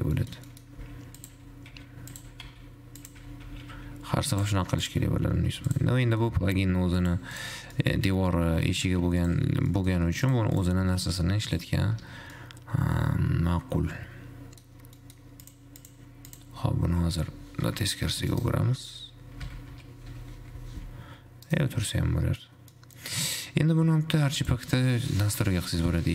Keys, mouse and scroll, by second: 0.4 shift+middle click, 0.6 scroll down 2, 0.9 middle click, 0.9 g, 1.5 e, 2.5 e, 5.0 shift+click, 5.4 f, 5.9 shift+click, 6.3 middle click, 6.8 f, 7.3 click, 7.9 click, 8.0 middle click, 8.4 g, 9.9 Tab, 9.9 middle click, 10.3 scroll up 1, 10.5 click, 11.8 click, 12.4 `, 12.6-15.8 middle drag, 15.8 click, 16.5 click, 17.4 r, 19.8 r, 22.4-23.4 middle drag, 23.4-24.3 scroll up 2, 24.9 click.